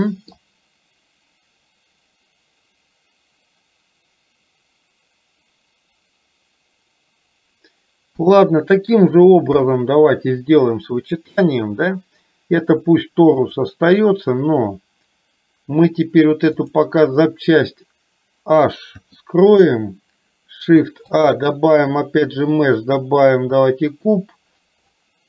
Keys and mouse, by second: 8.2 KP_1, 12.9 click, 16.7 click, 21.2 shift+a.